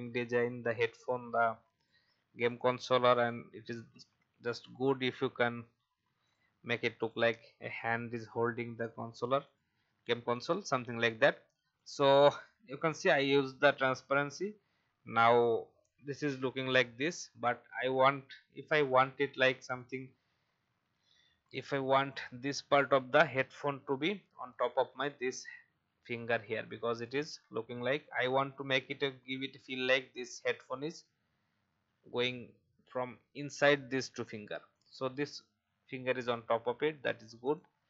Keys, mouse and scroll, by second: 0.6 click, 3.9 ctrl+f, 6.2 click, 11.1-11.7 alt+scroll up 1, 11.7 click, 19.0-19.6 alt+scroll up 1, 19.6 click, 20.6 shift+e, 21.5-26.6 drag, 26.6 v, 26.9 click.